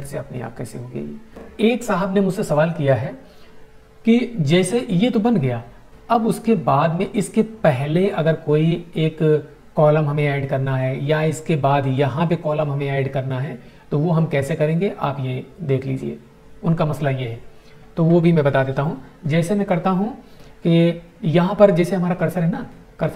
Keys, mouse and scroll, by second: 23.1 right click.